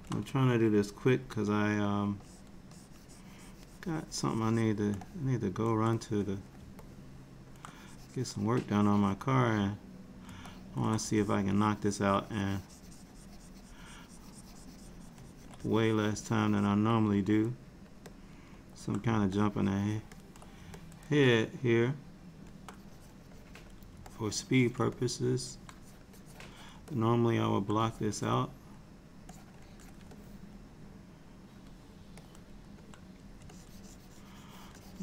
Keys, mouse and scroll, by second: 1.4 f, 2.3 click, 2.8 click, 5.1 middle click, 6.0 click, 6.9 middle click, 7.8 click, 8.7 click, 9.5 middle click, 10.5 ctrl+middle click, 11.2 ctrl+click, 11.6 ctrl+click, 13.2 ctrl+click, 13.7 ctrl+click, 13.9 ctrl+click, 15.7 shift+click, 16.3 shift+click, 16.8 shift+click, 17.4 middle click, 18.2 middle click, 19.4 ctrl+click, 20.2 ctrl+click, 20.8 middle click, 22.8 click, 23.4 click, 24.2 ctrl+click, 25.0 middle click, 25.9 click, 26.3 click, 26.6 click, 26.9 middle click, 28.0 click, 28.2 click, 29.4 click, 29.7 click, 30.2 alt+middle click, 32.3 middle click, 33.6 shift+click, 34.8 shift+click.